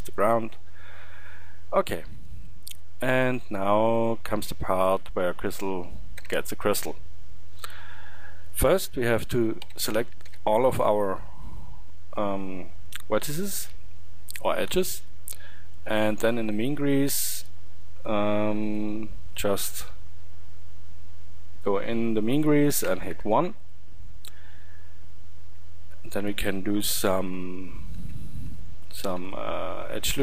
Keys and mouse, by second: 1.0 middle drag, 6.3 shift+Tab, 9.6 a, 10.3 a, 14.4-25.5 middle drag, 25.5 Tab, 27.2 ctrl+r, 28.0 Tab, 29.2 ctrl+r.